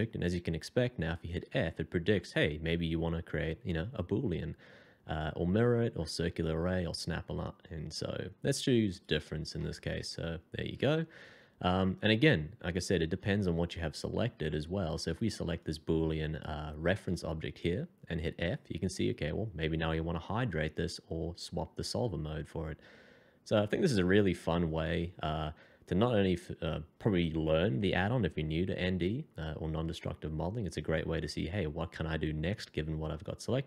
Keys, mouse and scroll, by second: 1.4 f, 9.6 middle click, 18.2 f.